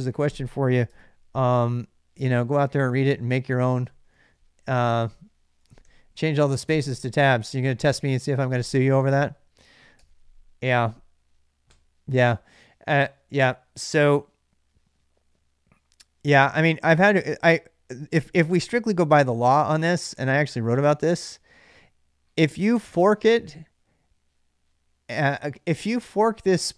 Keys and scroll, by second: 0.7 super+Tab, 4.4-6.1 typing, 6.4 Return, 9.8 alt+Tab.